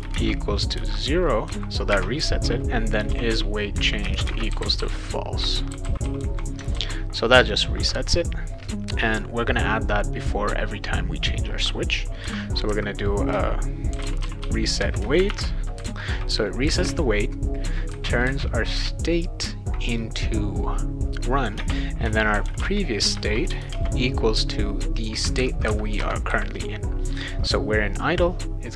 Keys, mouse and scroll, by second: 0.0-6.7 typing, 10.2 click, 12.2 ;, 13.6-15.8 typing, 21.6-23.7 typing, 23.1 Return, 26.0 Return, 26.3 ;.